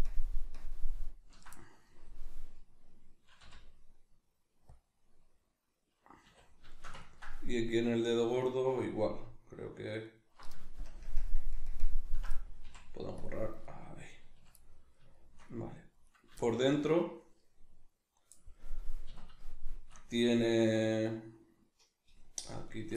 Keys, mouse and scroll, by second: 0.1 ctrl+KP_Subtract, 2.9-10.0 middle drag, 3.4 x, 6.3 a, 10.0 alt+right click, 10.9 ctrl+KP_Add, 11.6 ctrl+KP_Subtract, 12.7 x, 13.7-16.0 middle drag, 14.4 a, 16.0 right click, 16.4-22.7 shift+middle drag, 19.1 a, 22.7 right click.